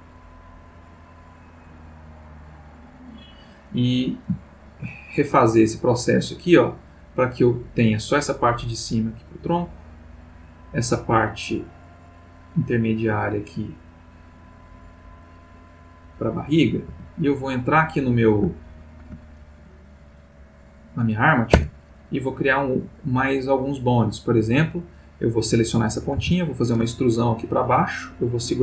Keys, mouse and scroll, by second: 0.2-1.0 drag, 1.6 click, 2.2 click, 2.8 click, 4.5 shift+middle click, 5.8-8.0 drag, 9.6 click, 12.0-14.3 drag, 15.2 click, 15.9 click, 16.9 Tab, 17.7 click, 18.6-19.3 ctrl+middle drag, 21.5 Tab, 24.7 click, 26.2 e.